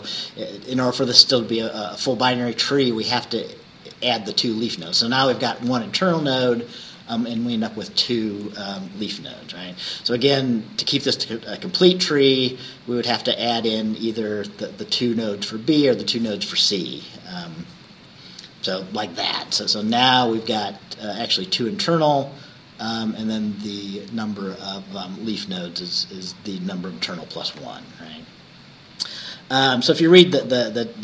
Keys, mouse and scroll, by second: 18.0 Right, 29.3 Right.